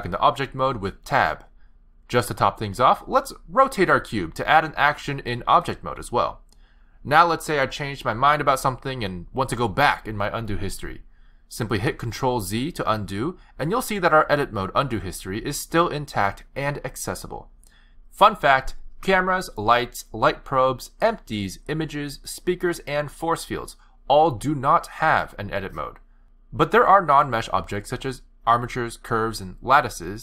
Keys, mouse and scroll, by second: 0.2 Tab, 3.2 r, 5.0 r, 5.7 r, 12.6 ctrl+z, 12.9 ctrl+z, 13.4 ctrl+z, 14.0 ctrl+z, 14.8 ctrl+z, 15.0 ctrl+z, 15.2 ctrl+z, 15.5 ctrl+z, 15.7 ctrl+z, 16.0 ctrl+z, 16.2 ctrl+z, 16.4 ctrl+z, 16.6 ctrl+z, 16.8 ctrl+z, 17.0 ctrl+z, 17.2 ctrl+z, 18.3 ctrl+z, 18.6-19.2 ctrl+z, 19.6 ctrl+z, 19.8 ctrl+z, 21.6 click, 22.6 click, 26.4 shift+a, 28.3 g, 29.6 Tab, 30.0 click.